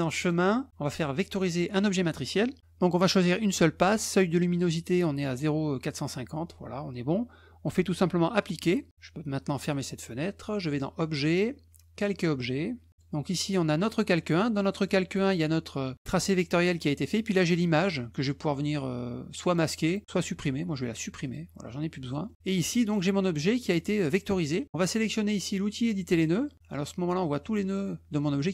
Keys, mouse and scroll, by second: 0.2 click, 1.5 click, 8.4 click, 9.6 click, 10.7 click, 11.9 click, 12.9 click, 14.7 click, 16.1 click, 17.1 click, 19.4 click, 21.2 click, 22.2 middle click, 22.6 click, 23.6 middle click, 25.9 click.